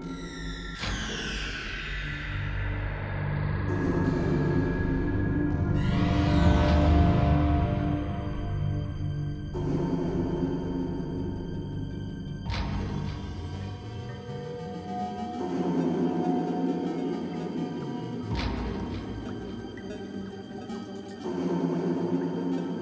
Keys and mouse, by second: 0.0-1.6 typing, 1.9 Tab, 2.2 click, 2.8 click, 3.3 KP_Divide, 3.5 z, 3.7 a, 3.9 Tab, 4.9 ctrl+x, 5.8 ctrl+x, 6.0 z, 6.1 KP_7, 7.1 ctrl+x, 7.1 ctrl+z, 7.4 ctrl+x, 7.6 ctrl+x, 7.8 ctrl+z, 7.9 ctrl+z, 8.0 Tab, 8.4 Tab, 8.8 z, 9.1-9.9 drag, 9.7 ctrl+x, 10.1 ctrl+z, 10.4 ctrl+z, 10.9 ctrl+x, 11.7 ctrl+r, 13.1 click, 13.2 z, 14.0 click, 14.3 z, 14.6 ctrl+b, 16.2 Tab, 16.5 t, 17.5 t, 17.8 a, 18.6 Tab, 19.8 middle click, 20.0 middle click, 20.2 z, 21.1 middle click, 21.7 ctrl+b.